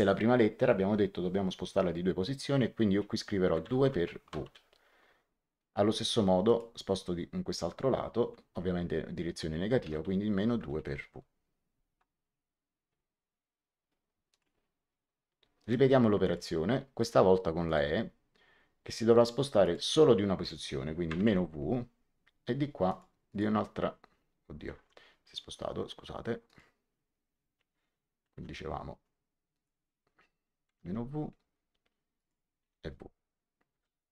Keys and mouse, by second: 3.5 2, 3.7 KP_Multiply, 4.4 w, 6.4 click, 9.7 KP_Subtract, 9.8 KP_2, 10.5 KP_Multiply, 10.7 w, 14.2 click, 15.5 right click, 16.1 click, 17.6 click, 19.5 click, 21.0 KP_Subtract, 21.2 w, 22.8 click, 24.6 Escape, 26.4 click, 28.3 m, 29.4 click, 30.6 KP_Subtract, 30.8 w, 32.1 click, 32.5 w, 33.7 Return, 33.7 KP_Enter.